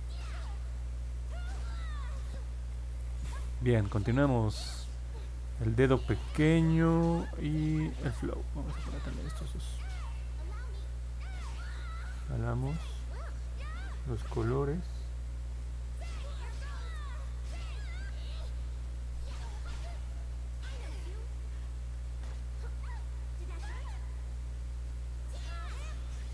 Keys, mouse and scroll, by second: 12.1 click, 12.7 click, 13.3 click, 13.8 click, 14.4 click, 15.0 click, 15.5 click, 17.8 click, 19.5 click, 19.9 click, 20.2 click, 20.5 click, 20.8 click, 21.4 click, 22.2 click, 23.6 click, 23.9 click, 24.3 click, 24.6 click, 24.9 click, 25.2 click, 25.5 click, 25.9 click, 26.2 click.